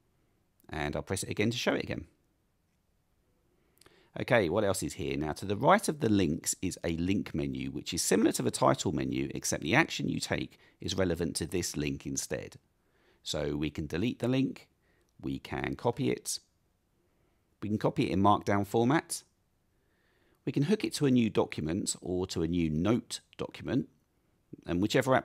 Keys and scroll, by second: 1.9 alt+super+r.